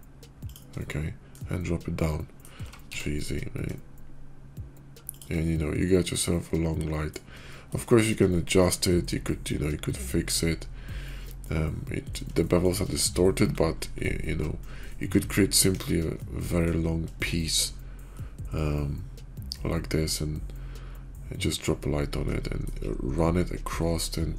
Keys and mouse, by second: 0.7-1.2 middle drag, 1.9-2.4 middle drag, 2.5 g, 5.3-7.0 middle drag, 7.3 shift+middle click, 8.2 shift+middle drag, 11.3-11.9 middle drag, 12.3-14.3 shift+middle drag, 14.8-15.4 middle drag, 15.6 KP_5, 16.0-16.5 middle drag, 17.0 shift+middle click, 18.0-22.3 middle drag, 22.3 click, 23.7-24.3 drag.